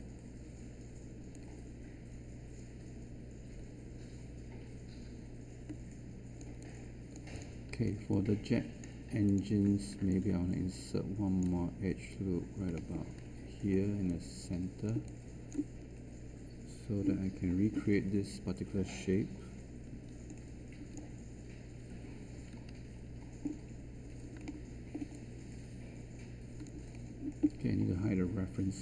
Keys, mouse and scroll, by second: 19.9 q, 22.5 1.